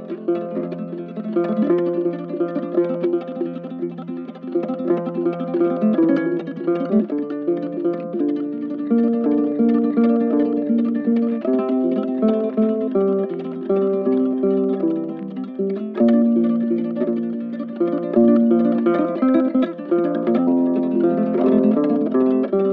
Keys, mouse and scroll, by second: 3.7 ctrl+shift+click, 4.0 ctrl+shift+space, 4.4 ctrl+shift+space, 6.5 ctrl+z, 7.4 ctrl+z, 8.4 ctrl+shift+space, 10.7 ctrl+shift+click, 13.5 ctrl+shift+click, 13.8 ctrl+shift+space, 15.7 shift+click, 16.8 shift+click, 18.1 shift+click, 19.9 shift+click, 20.9 shift+click, 22.0 shift+click.